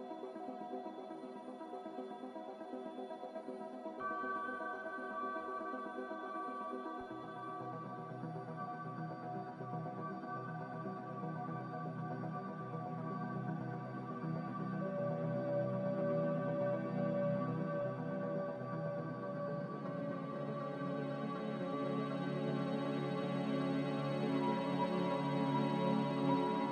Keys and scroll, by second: 6.0 ctrl+z, 24.6 ctrl+z.